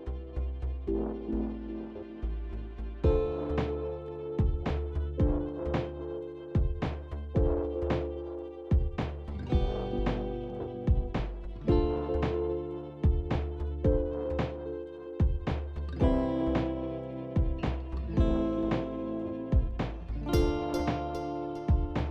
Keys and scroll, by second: 13.9 0, 14.1 Return.